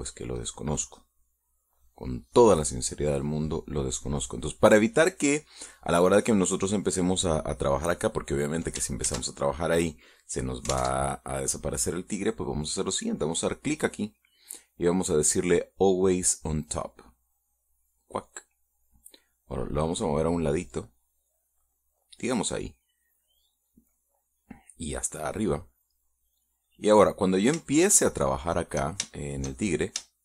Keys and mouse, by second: 0.3-2.9 drag, 8.6 click, 9.8 ctrl+z, 11.5 alt+Tab, 14.2 click, 18.4 click, 19.9-26.2 drag, 28.5-29.6 shift+middle drag, 29.8-30.2 shift+middle drag.